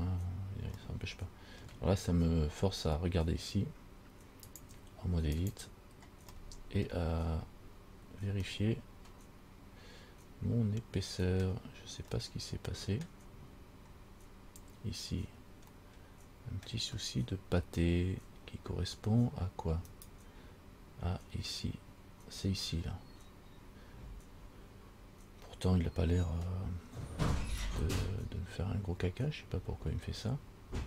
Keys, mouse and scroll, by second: 1.0 middle click, 4.6 click, 5.7 click, 6.7 middle click, 7.5-8.3 scroll up 5, 8.7 middle click, 12.4 middle click, 16.1 middle click, 20.1 right click.